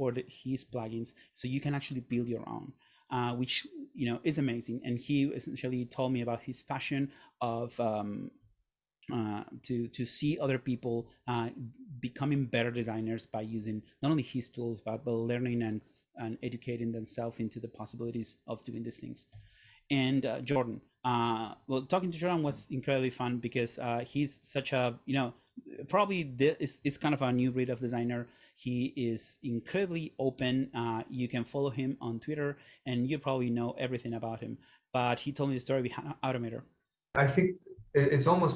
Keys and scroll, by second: 19.5 Right, 27.6 super+/, 30.6 Return.